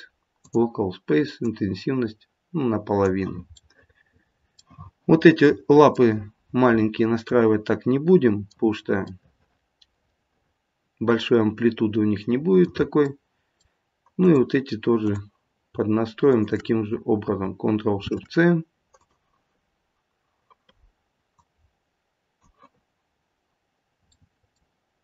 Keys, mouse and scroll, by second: 1.4 click, 3.7 middle click, 5.4 middle click, 7.3 middle click, 9.1 middle click, 10.4 middle click, 13.0 middle click, 14.2 click, 15.0 click, 16.2 shift+click, 16.6 shift+click, 18.0 ctrl+shift+c, 21.3 click, 24.1 middle click.